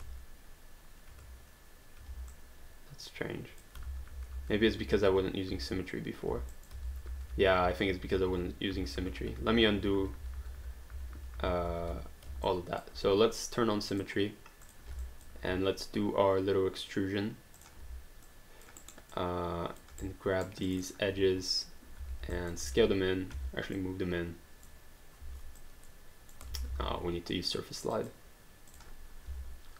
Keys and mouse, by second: 2.3 alt+click, 3.9 ctrl+z, 6.6 alt+click, 6.9 ctrl+z, 12.5 alt+click, 13.9 click, 15.0 alt+click, 17.6 click, 18.3 alt+click, 18.9 alt+right click, 19.1 alt+click, 20.0 right click, 20.7 click, 22.4 alt+click, 22.6 r, 23.3 w, 23.8 click, 25.6 click, 26.5 ctrl+z, 27.9 click, 29.3 w.